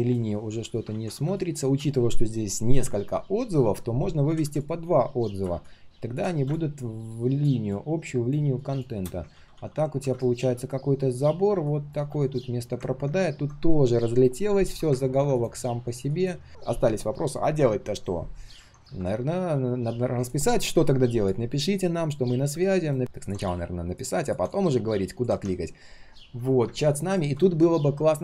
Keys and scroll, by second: 0.9 ctrl+z, 9.3 ctrl+z, 9.5 ctrl+z.